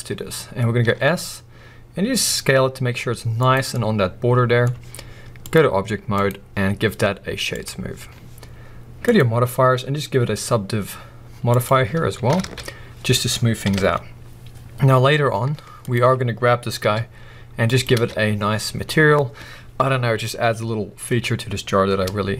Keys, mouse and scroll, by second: 0.8 s, 3.5 click, 3.7-5.4 middle drag, 5.4 click, 6.1-15.9 drag, 12.3 alt+a, 13.6 KP_1, 15.1-15.8 scroll up 2, 16.2 scroll down 1, 16.8 s, 17.8 click, 17.9 alt+a, 18.8-22.3 scroll down 1.